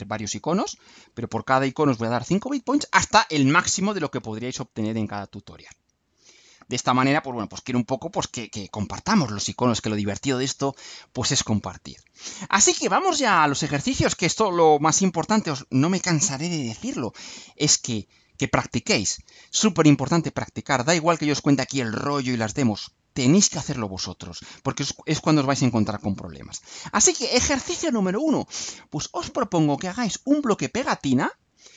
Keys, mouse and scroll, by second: 6.4 scroll down 2, 11.0 scroll down 2, 12.9-13.2 scroll down 2, 31.0 scroll down 2.